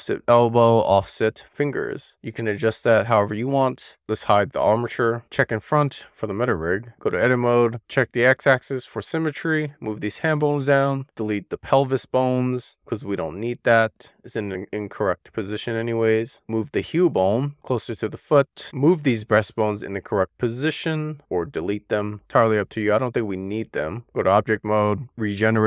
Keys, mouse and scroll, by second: 5.0 click, 5.8 click, 6.7 middle click, 6.9 click, 7.7 shift+middle click, 8.5 click, 9.5-10.9 drag, 12.7 x, 14.9 middle click, 15.4 middle click, 16.0-16.4 scroll up 3, 16.4 shift+middle click, 17.2 click, 17.3 middle click, 17.5 click, 17.6 middle click, 18.1 click, 18.3 middle click, 18.8 click, 19.0 middle click, 19.7 shift+click, 21.3-23.1 drag, 23.2 middle click, 24.2-25.4 drag.